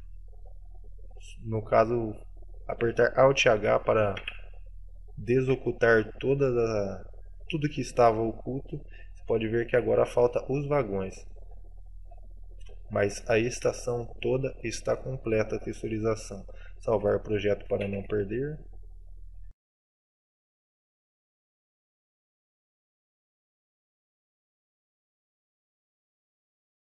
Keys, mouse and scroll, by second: 0.3 middle click, 1.3 middle click, 2.5-3.2 scroll up 1, 4.3 alt+h, 5.5 a, 5.8 middle click, 6.6-7.2 scroll down 3, 7.2 middle click, 9.3-10.6 scroll up 9, 9.6 shift+middle click, 10.6 middle click, 11.4 shift+middle click, 12.2 shift+scroll up 1, 12.2 shift+middle click, 12.8 shift+middle click, 13.4 shift+middle click, 13.9 middle click, 14.8-15.1 scroll down 4, 15.0 middle click, 15.8-16.2 scroll down 2, 18.0 ctrl+s.